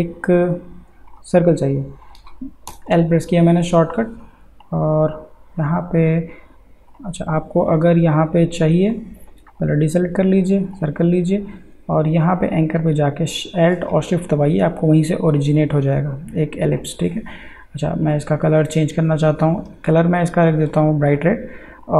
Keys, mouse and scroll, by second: 2.7 l, 4.6 click, 6.9 click.